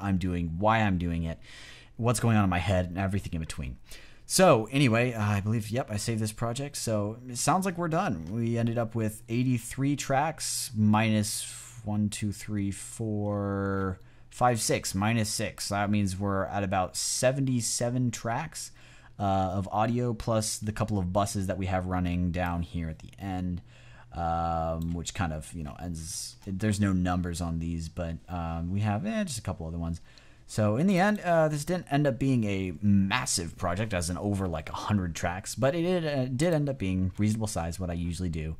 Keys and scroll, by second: 20.9 x.